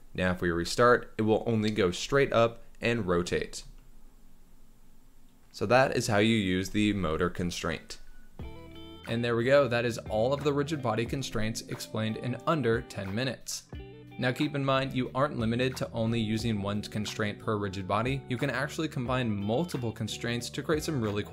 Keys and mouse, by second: 2.0 space, 11.8-13.7 drag, 14.7-16.7 drag, 18.0 space.